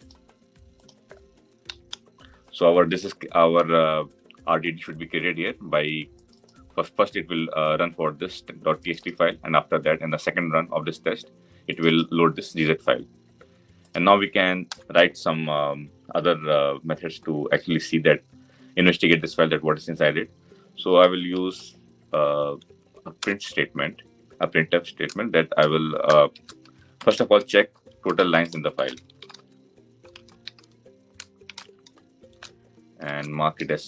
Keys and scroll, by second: 23.0 Return.